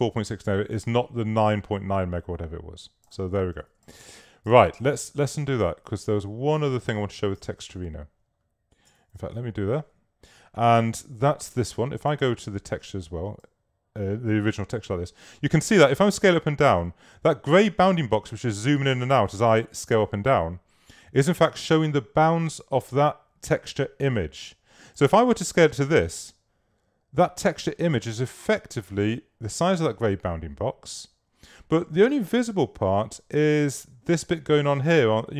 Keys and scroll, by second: 4.3 super+z, 9.0 shift+super+z.